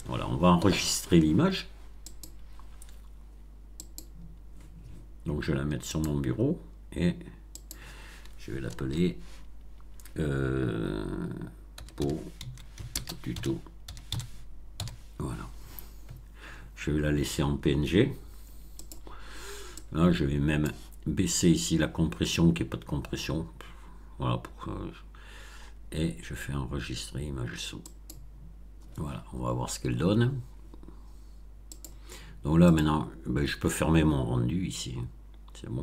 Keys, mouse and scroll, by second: 2.0 click, 3.7 click, 5.8 click, 7.5 click, 8.7 BackSpace, 11.7-14.7 typing, 18.7 click, 19.7-20.7 drag, 27.8 click, 31.6 click, 32.6 click.